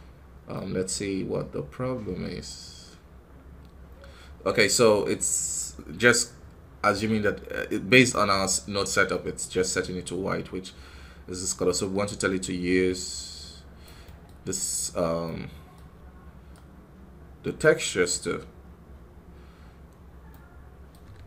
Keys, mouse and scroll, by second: 13.7-19.6 drag, 20.2 middle click, 20.8 scroll up 1, 21.0 KP_3.